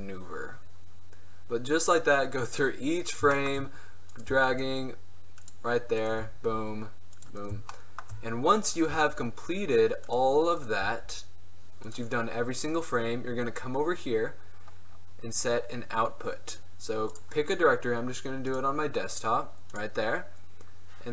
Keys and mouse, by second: 2.6-2.9 middle drag, 4.3 click, 4.3 right click, 4.4 g, 6.3 g, 9.1 g, 10.9 g, 12.5-14.1 middle drag.